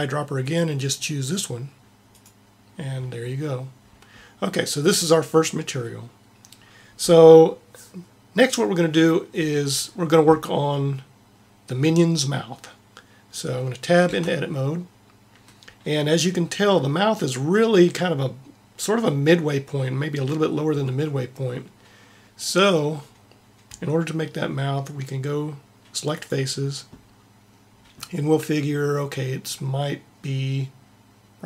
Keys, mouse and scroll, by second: 14.1 Tab, 26.1-31.4 drag.